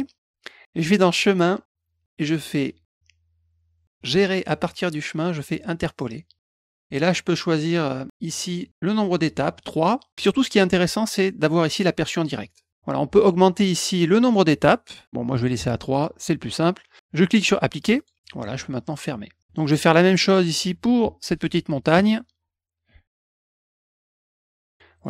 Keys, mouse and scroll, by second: 0.8 click, 5.5 click, 6.4 click, 12.0 click, 14.2 click, 15.3 click, 15.9 click, 17.9 click, 18.9 click, 19.3 click, 19.4 middle click, 20.1 middle click, 22.3 click, 22.4 click, 22.7 click, 23.2 click, 23.5 click, 23.7 click, 23.9 click, 24.1 click, 24.7 middle click.